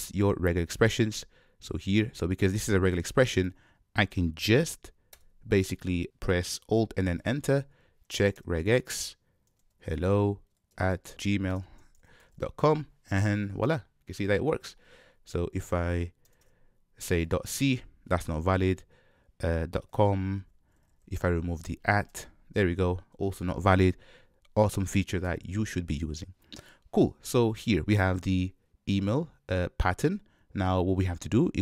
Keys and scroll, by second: 5.1 alt+Return.